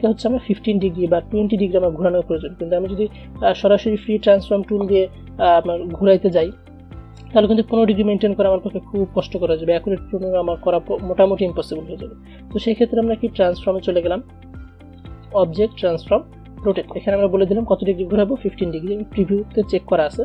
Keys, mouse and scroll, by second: 12.5 ctrl+z, 15.1 click, 19.7 click.